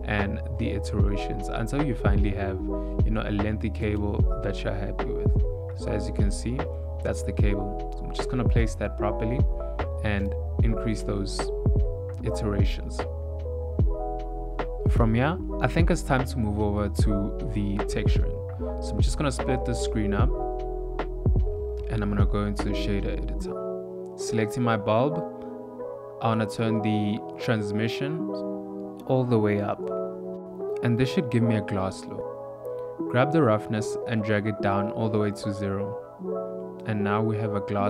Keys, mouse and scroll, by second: 1.3 shift+middle click, 1.5 ctrl+middle click, 3.2 ctrl+middle click, 3.4 s, 5.9 g, 8.9 shift+middle click, 10.1-10.7 click, 11.9 ctrl+middle click, 13.4 click, 13.6 click.